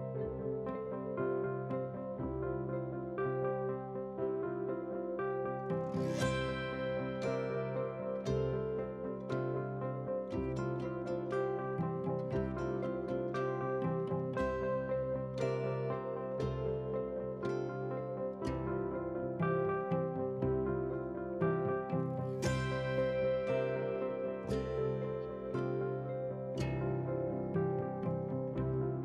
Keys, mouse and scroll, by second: 0.1 middle drag, 0.4 middle drag, 0.7 middle click, 1.1-2.4 scroll up 2, 2.4 KP_7, 2.8 shift+d, 4.1 drag, 4.5 scroll down 1, 4.6 shift+middle click, 5.1 scroll up 2, 5.3 shift+middle click, 5.9 alt+click, 6.1 alt+shift+click, 6.5 g, 8.1 scroll down 2, 8.4 middle click, 8.9 middle click, 9.4 scroll down 1, 9.8-10.1 drag, 10.3 click, 10.7 r, 11.7 scroll down 1, 11.8 middle drag, 12.2-12.6 scroll down 4, 12.6 shift+middle drag, 13.2 shift+click, 13.5 KP_1, 14.1 g, 15.4 click, 15.6 click, 15.8 g, 17.4 shift+click, 17.7 s, 18.7-19.0 scroll up 1, 19.0 g, 20.0 click, 20.4 click, 20.7 g, 21.5 g, 22.7 click, 22.8 shift+middle click, 23.5 g, 24.5 shift+d, 26.1 shift+d, 27.0 shift+d, 28.4 g.